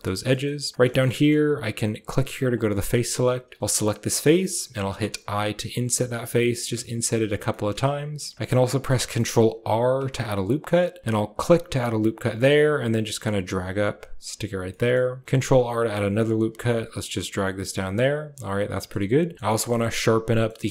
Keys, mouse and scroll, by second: 0.0 click, 0.3 shift+click, 0.7 click, 0.8 shift+click, 1.0 middle click, 2.4 click, 2.6 middle click, 2.8 shift+middle click, 3.4 click, 4.8 i, 6.3 i, 7.4 click, 9.6 ctrl+r, 14.6 click, 15.2 ctrl+r, 18.2 click, 18.9 Tab, 19.4 shift+middle click, 19.7 middle click, 20.2 middle click, 20.6 shift+middle click.